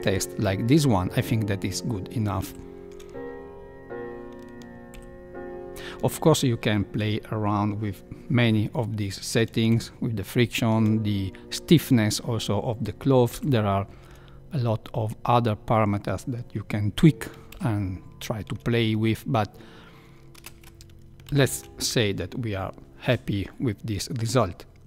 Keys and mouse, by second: 2.5 shift+Left, 4.9 shift+Left, 10.4 shift+Left, 13.7 shift+Left, 18.0 shift+Left, 20.3 space, 21.3 Left.